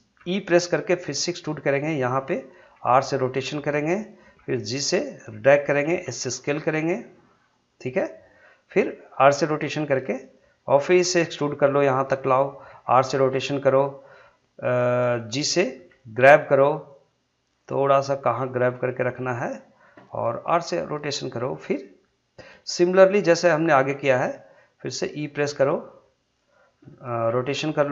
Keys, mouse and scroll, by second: 0.2 e, 1.9 click, 2.8 r, 3.9 click, 4.4 g, 5.6 click, 6.0 s, 7.5 click, 9.2 r, 10.2 click, 10.9 e, 11.9 click, 12.7 r, 13.6 click, 15.8 g, 16.9 click, 18.1 g, 19.3 click, 20.5 r, 21.4 click, 25.0 e, 26.3 click, 27.3 r.